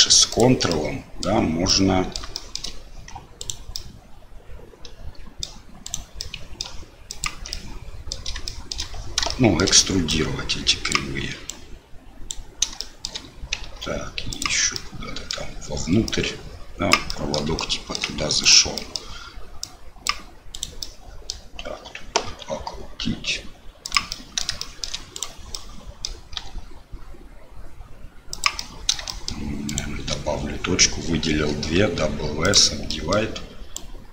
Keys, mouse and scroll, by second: 0.3 ctrl+click, 0.7 middle click, 1.6 middle click, 2.3 shift+middle click, 3.4 click, 3.7-5.4 middle drag, 5.8 click, 6.2 middle click, 7.2 ctrl+click, 7.5 middle click, 8.4 shift+middle click, 9.2 shift+middle click, 10.1-12.3 drag, 12.9 shift+middle click, 14.3 ctrl+click, 14.7 middle click, 16.1-17.1 drag, 17.2 middle click, 17.7 shift+middle click, 18.4 click, 18.7 middle click, 19.6 click, 20.5 click, 20.8 middle click, 22.3 r, 24.1 click, 24.2 middle click, 24.6 shift+click, 24.7 shift+middle click, 25.1 click, 25.5 click, 26.3 r, 28.7 middle click, 29.1 middle click, 29.6 shift+click, 31.7 w, 32.9 middle click, 33.7-34.1 drag.